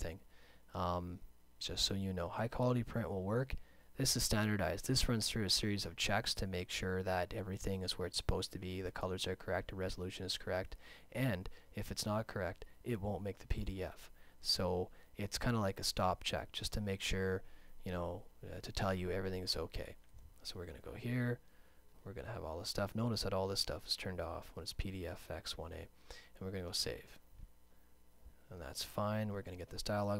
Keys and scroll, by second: 30.1 `.